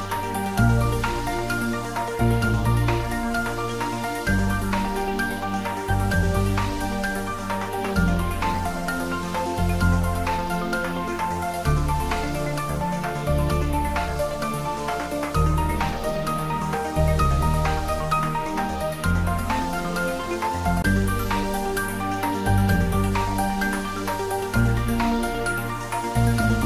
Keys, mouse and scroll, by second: 0.3 click, 3.3 s, 3.5 z, 6.3 click, 7.1-7.5 scroll down 1, 8.4 click, 9.2-10.3 scroll up 1, 10.3 s, 11.5 click, 11.8-12.2 scroll up 1, 14.3 click, 15.5-15.8 scroll up 1, 16.6-18.8 drag, 19.1 3, 20.1-21.2 scroll up 1, 22.7 r, 23.0 r, 25.4 Left, 26.3 Right.